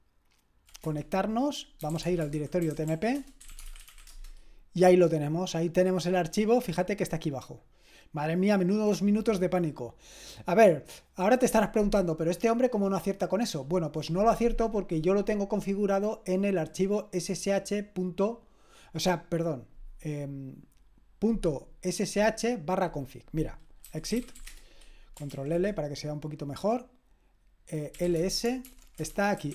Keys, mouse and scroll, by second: 0.9 Return, 1.6-4.4 typing, 8.5-14.9 drag, 23.6-24.8 typing, 25.3 ctrl+l, 27.7-29.5 typing.